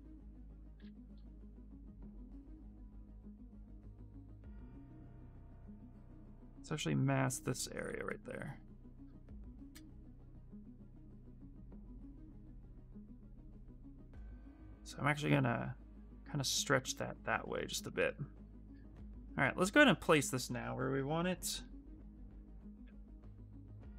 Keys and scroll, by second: 0.5 s, 1.8 s, 5.3 ctrl+z, 5.4 ctrl+z, 8.7-9.6 typing, 17.3 q, 21.6 w.